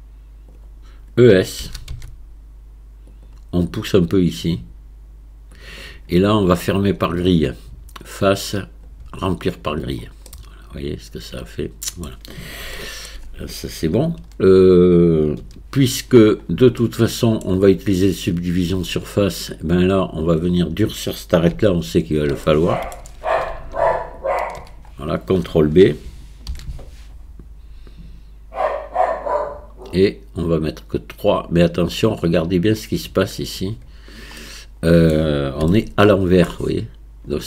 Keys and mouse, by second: 1.6 e, 4.1-5.6 drag, 8.1-9.8 drag, 10.3-12.1 middle drag, 12.8 shift+middle click, 14.2 KP_1, 15.4 KP_3, 16.8 shift+middle click, 19.6-21.5 drag, 21.8 alt+click, 22.5 middle click, 24.2 alt+shift+click, 26.5 ctrl+b, 34.4 middle click, 35.8 shift+middle click.